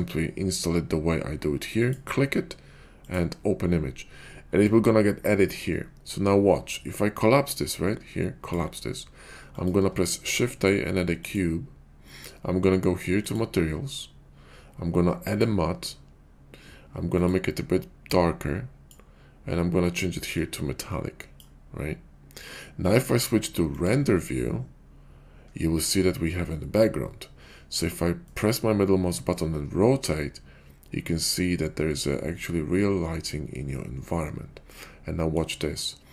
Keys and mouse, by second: 7.3-8.6 drag, 10.2 shift+a, 20.3-21.4 drag, 28.3-35.4 middle drag.